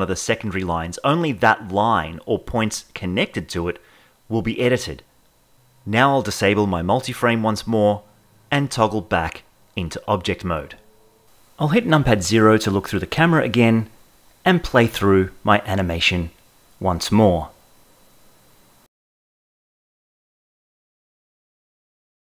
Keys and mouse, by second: 0.3 g, 0.5 y, 1.7 click, 2.5 click, 3.5 g, 3.7 y, 4.5 click, 8.4 ctrl+Tab, 12.2 KP_0, 13.0 shift+Left, 14.9 space.